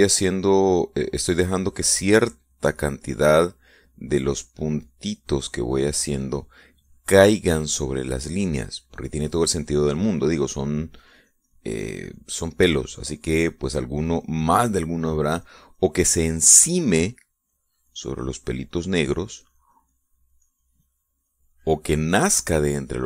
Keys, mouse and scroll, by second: 1.9-15.5 drag, 15.9-17.4 drag, 17.5 middle click, 18.4-23.0 drag.